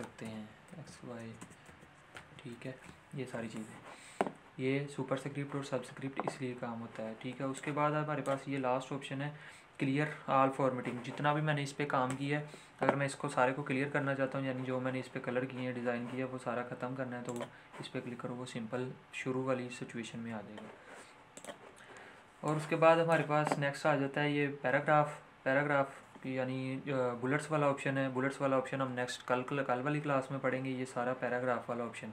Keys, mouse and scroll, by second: 0.2-2.1 typing, 7.5-17.2 drag, 20.2 ctrl+z, 21.3-25.6 drag.